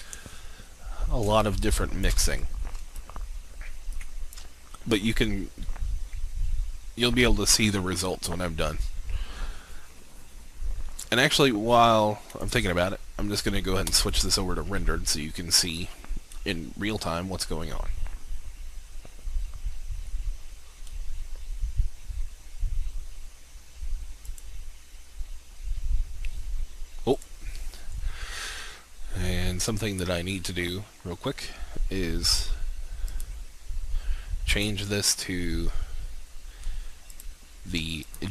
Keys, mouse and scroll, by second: 1.4 alt+shift+click, 2.9 alt+shift+click, 12.3-15.1 drag, 16.3-19.9 scroll up 1, 24.3 click, 27.2-28.3 drag.